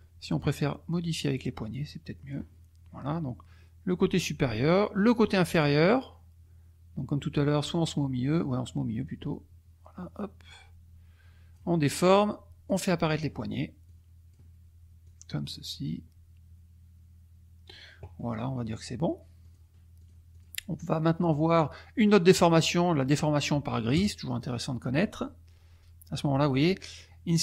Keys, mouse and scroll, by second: 1.2-2.5 drag, 5.1 click, 9.0-11.7 drag, 12.0 click, 13.8 click, 15.0-18.0 drag, 19.4 click, 20.1 click, 20.4 click, 21.5 click, 24.0 click, 27.3 click.